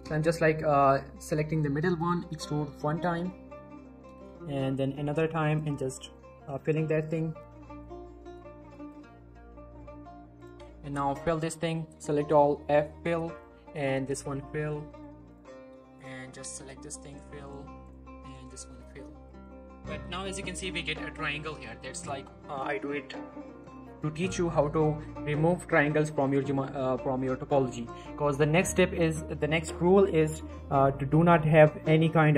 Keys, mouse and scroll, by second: 0.5-1.8 scroll up 3, 0.8 shift+middle click, 1.8 e, 2.9 click, 3.1 scroll down 1, 3.3 middle click, 4.8 e, 5.5 click, 5.9-6.5 scroll down 1, 6.5 z, 7.0 click, 7.4-7.9 middle drag, 10.4 shift+click, 10.4 shift+click, 12.3 f, 13.0 click, 13.4 shift+click, 14.1 f, 14.3-14.8 middle click, 14.9 click, 15.3 shift+click, 16.2 shift+click, 16.4 f, 17.1 click, 17.4 shift+click, 18.6 f, 18.8-19.3 middle click, 19.3 scroll up 1, 19.6 middle click, 25.5 middle click, 25.9 click, 26.1 scroll down 1, 26.3 middle click, 26.5 scroll up 1, 26.7 shift+middle click, 27.0 middle click, 27.2 scroll up 1, 27.5-28.5 scroll down 1, 29.0 click, 30.9 middle click, 31.0 scroll down 1, 31.6 middle click, 31.7-32.2 scroll up 1, 32.2 middle click.